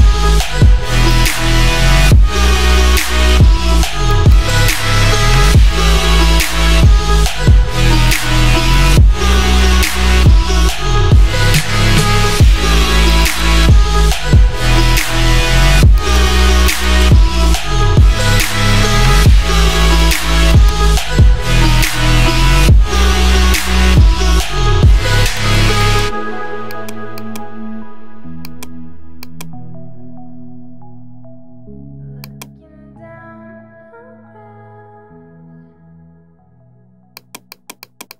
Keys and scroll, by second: 3.3 ctrl+j, 4.8-7.6 typing, 13.9 3, 14.3 Return, 17.4-19.5 typing, 23.8 alt+BackSpace, 28.8 space, 31.5 [.